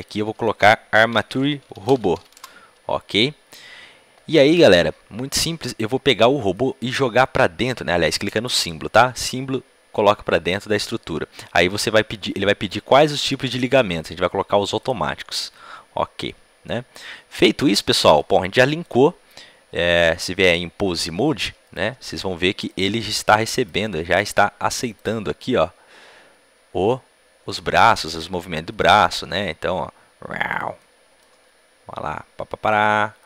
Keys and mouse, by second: 15.7 middle click, 16.1 click, 16.2-18.8 middle drag, 18.8-21.9 drag, 21.9 g, 23.7 g, 25.0 g, 28.9 g, 30.3 right click, 30.6 right click, 31.3 g.